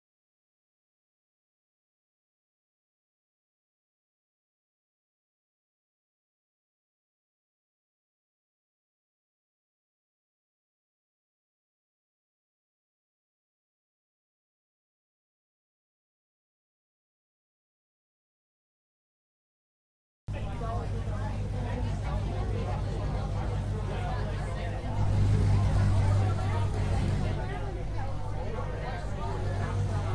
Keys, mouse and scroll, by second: 13.7-18.3 right drag, 18.3-30.1 drag.